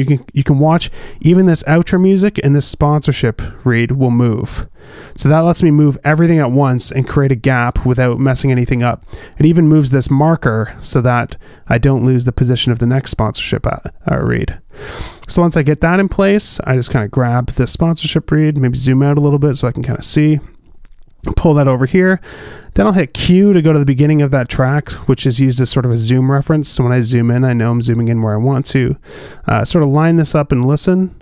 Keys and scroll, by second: 25.1 q.